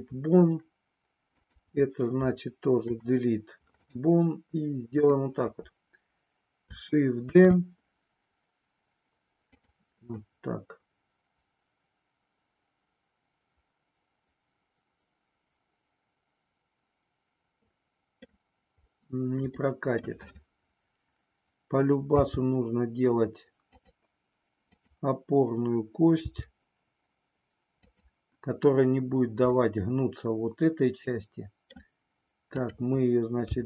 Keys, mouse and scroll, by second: 2.9 Delete, 4.9 click, 7.4 shift+d, 9.5 click, 10.2-18.4 middle drag, 19.5 middle click, 22.2 g, 24.7 click, 26.2 g, 27.7 click, 29.6-31.7 middle drag, 33.5 g.